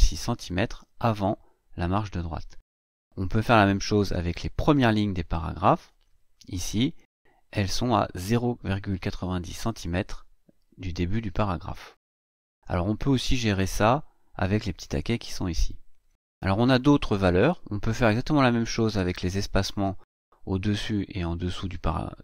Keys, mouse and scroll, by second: 3.3 Right.